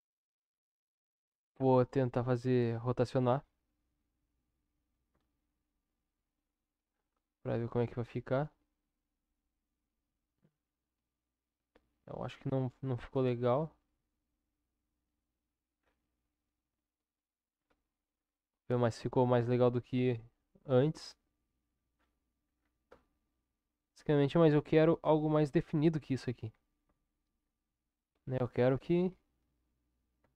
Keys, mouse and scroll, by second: 3.3 r, 15.0 Tab, 16.7-17.4 middle drag, 18.3-24.1 middle drag, 24.1-24.8 drag, 24.8-26.0 middle drag, 26.0-26.8 drag, 26.8 Tab, 28.8 ctrl+KP_7.